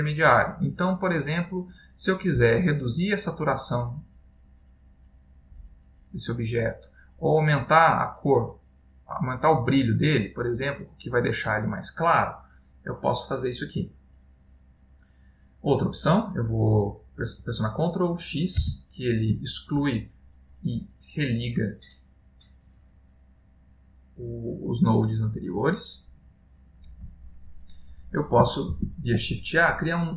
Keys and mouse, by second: 3.3 click, 3.7 click, 4.1 click, 4.3-6.2 click, 4.6 click, 4.7 click, 5.5 click, 7.6 click, 7.8-10.2 click, 8.1 click, 8.2 click, 9.2 click, 9.4 click, 10.6 click, 10.7 click, 11.6 click, 13.4 middle click, 15.0 click, 19.2 ctrl+x, 28.9 shift+a.